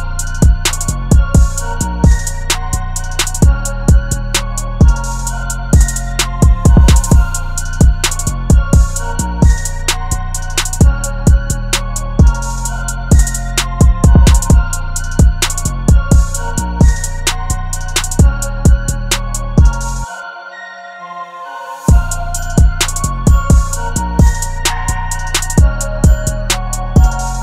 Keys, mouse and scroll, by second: 5.8 double click, 9.4 typing, 11.3 typing, 12.1 double click, 13.5-16.3 typing, 14.5 double click, 16.1 double click, 17.4 typing.